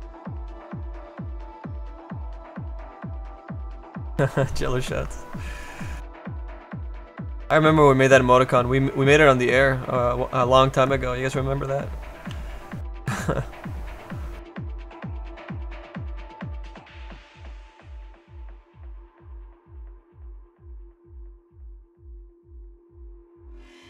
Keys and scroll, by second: 12.2 s, 15.3 ctrl+z, 15.7 x, 19.0 z.